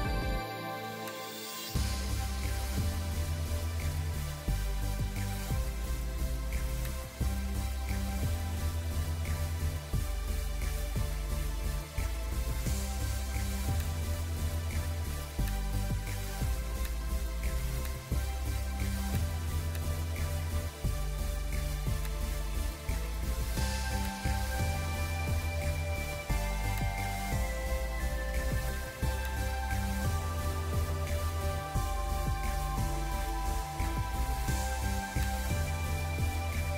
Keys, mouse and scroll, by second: 23.9 alt+click, 27.9 ctrl+m.